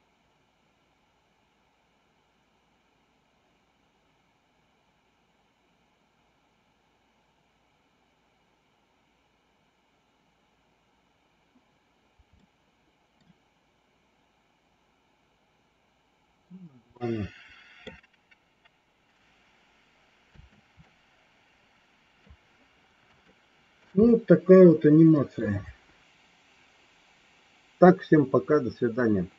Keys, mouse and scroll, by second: 12.2 middle click, 16.8 middle click, 20.3 space, 20.8-22.3 middle drag, 23.2 shift+middle click, 24.2-25.4 middle drag.